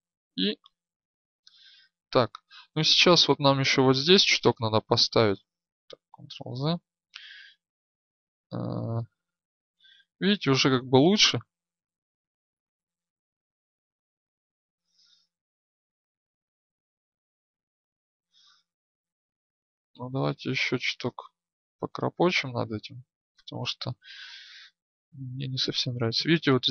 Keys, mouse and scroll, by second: 5.8 ctrl+z, 8.8-13.2 drag, 13.8 ctrl+z, 14.7 right click, 16.4-18.8 drag, 16.4-18.1 middle drag, 16.4-18.1 right drag, 18.8 ctrl+z, 19.8-22.7 right drag, 23.5-26.7 drag.